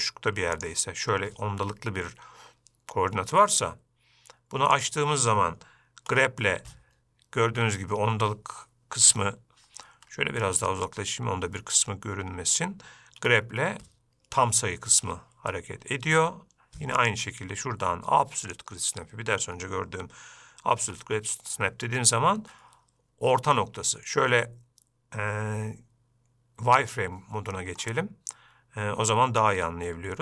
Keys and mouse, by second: 5.1 click, 6.5 g, 13.6 g, 17.4-19.4 drag, 21.2 g, 27.2 click.